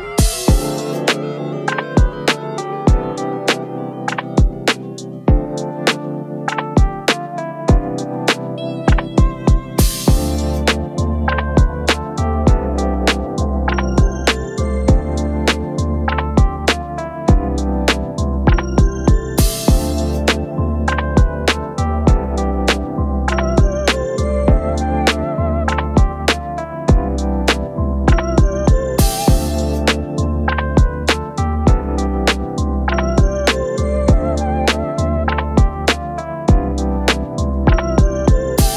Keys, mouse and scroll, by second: 1.5 1, 3.7 Return, 11.3-12.1 space, 13.1 space, 14.0 shift+click, 18.3 shift+click, 19.2 shift+click, 19.7-20.5 space, 22.6 double click, 27.9 ctrl+v, 32.3 typing, 35.8 typing, 37.4 5.